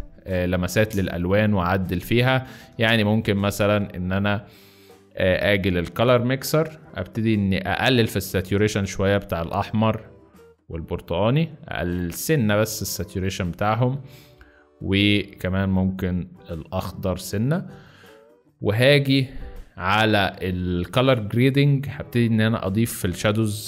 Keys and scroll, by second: 2.6 space.